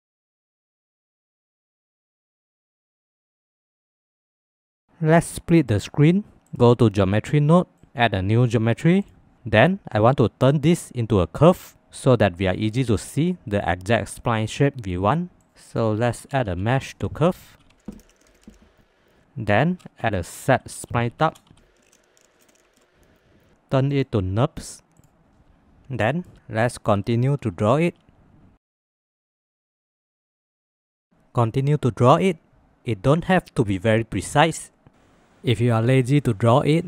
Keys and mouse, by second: 0.9 e, 5.8 click, 6.5-7.6 drag, 9.1-15.9 drag, 16.2 shift+a, 19.7 shift+a, 22.4 space, 23.4 click, 23.9-25.0 drag, 26.0 shift+middle click, 27.0 shift+middle click, 27.8 e, 29.0 g, 29.3 shift+click, 29.7 click, 29.8 g, 30.9 click, 30.9 g, 31.0 g, 31.4 shift+click, 31.7 shift+click, 32.0 click, 32.2-36.8 typing, 32.7 click, 33.7 click, 35.2 click, 35.5 click.